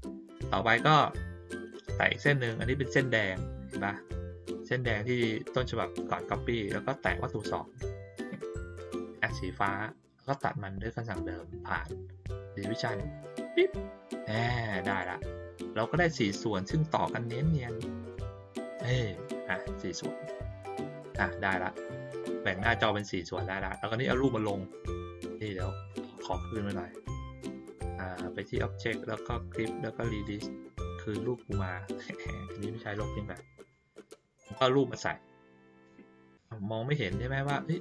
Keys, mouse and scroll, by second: 1.9 click, 7.4 shift+click, 11.1 click, 12.9 click, 14.9 click, 15.6 click, 18.1 click, 19.1 click, 20.9-21.3 ctrl+scroll down 2, 21.8 middle click, 22.5 ctrl+middle click, 22.5 ctrl+scroll up 2, 23.3 middle click, 24.2 click, 24.8 click, 26.4 click, 30.2 click, 31.2 click, 31.6 click, 33.7 click, 34.5-37.8 drag.